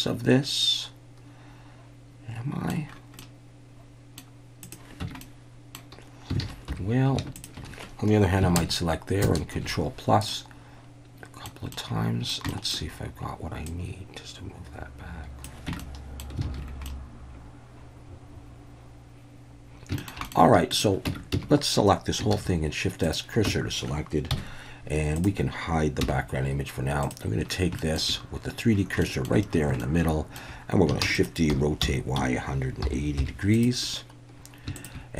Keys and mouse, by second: 3.2-4.2 middle drag, 4.6 click, 5.0 Tab, 5.2-5.8 middle drag, 6.4 alt+a, 6.7 3, 7.4 alt+shift+drag, 8.6 ctrl+KP_Add, 9.2 ctrl+KP_Add, 10.3-11.5 middle drag, 11.7-12.3 middle drag, 12.5 shift+middle drag, 13.7-15.4 drag, 15.7 Tab, 15.8-16.2 middle drag, 16.5 alt+a, 16.9-19.7 middle drag, 19.7 ctrl+s, 20.0 shift+middle click, 20.2 middle click, 20.7 click, 21.1 Tab, 21.3 a, 22.3 shift+s, 23.5 Tab, 24.3 KP_1, 25.2 click, 26.0 h, 27.8 shift+middle drag, 29.0 shift+middle drag, 29.8-30.4 shift+middle drag, 31.0-33.2 typing, 31.1 click, 33.5 click.